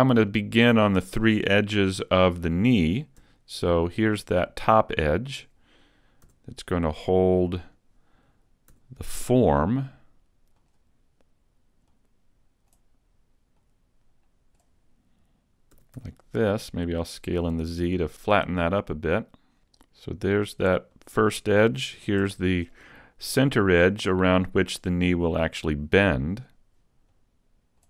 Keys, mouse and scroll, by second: 1.9 shift+middle click, 3.2 shift+middle click, 3.2 e, 5.4 click, 5.8 click, 6.3 s, 7.7 right click, 8.7 s, 10.7 click, 11.9 click, 13.6 click, 15.8 s, 18.2 click, 19.4 r, 21.1 click, 22.3 e, 24.8 click, 26.3 click, 27.1 click.